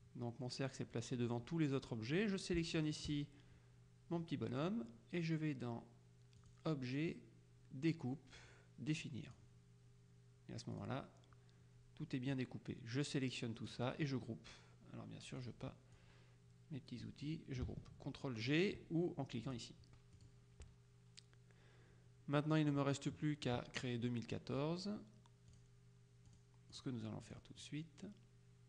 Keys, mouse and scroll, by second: 2.8 shift+click, 6.5 click, 9.4 click, 10.8 click, 12.4-14.3 drag, 15.5-17.6 drag, 19.6 click, 20.2 click, 23.2 middle click, 25.6 click, 26.4 click, 27.7 middle click, 27.8 click.